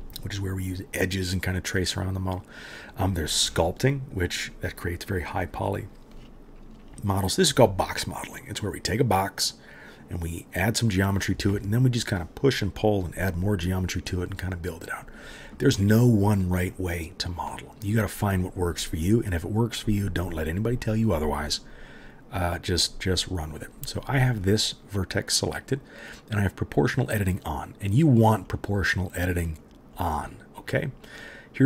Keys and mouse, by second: 26.8 middle click, 26.9 right click, 27.2 click, 27.2 middle click, 28.0 click, 28.0 middle click, 28.4 click, 28.4 middle click, 28.8 click, 28.8 middle click, 29.1 click, 29.1 middle click, 29.2 click, 29.2 middle click, 29.6 click, 29.6 middle click, 29.9 middle click, 30.0 right click, 30.2 middle click, 30.3-31.6 right drag.